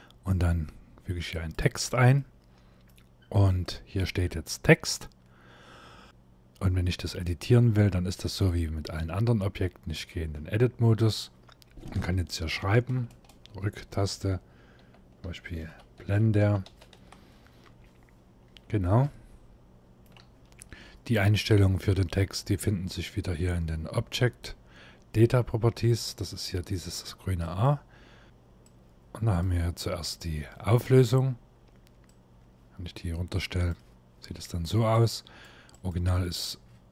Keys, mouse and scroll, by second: 1.8 middle click, 2.8-3.3 scroll up 4, 3.3 shift+middle click, 3.9 scroll up 1, 10.0 Tab, 12.6 BackSpace, 12.8 BackSpace, 13.0 BackSpace, 13.1 BackSpace, 14.5-16.6 typing, 17.3 Tab, 18.1 scroll down 1, 18.6 scroll down 1, 18.7 shift+middle click, 27.1 click, 28.3 click, 29.7 scroll up 3, 31.7 click.